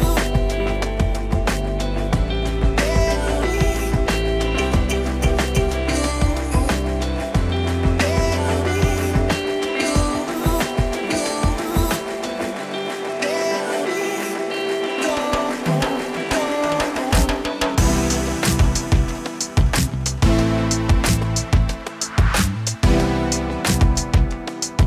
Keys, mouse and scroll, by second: 1.0 scroll up 1, 1.1-2.2 middle drag, 2.0 click, 3.2-4.3 middle drag, 5.0 click, 5.5 click, 5.5 f, 6.4 click, 10.3-13.1 middle drag, 13.3 click, 13.8 f, 15.3 middle click, 16.3 middle click, 17.3 click, 17.4 middle click, 17.9 f, 18.2-18.9 drag, 21.5 scroll down 1, 21.6-22.8 middle drag, 23.0 click, 23.4 f.